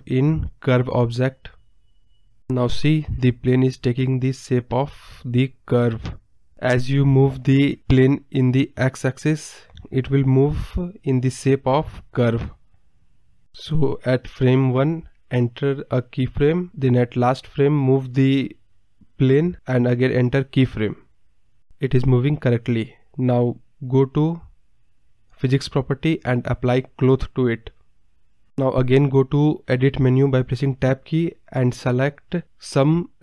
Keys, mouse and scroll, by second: 3.7 click, 4.4-6.5 drag, 10.8-14.1 drag, 15.3-19.1 drag, 19.9 click, 20.6 space, 22.3 space, 23.2 click, 24.2 scroll down 2, 26.0 click, 27.0-29.1 drag, 29.1 Tab, 29.8-31.0 middle drag, 31.0 click.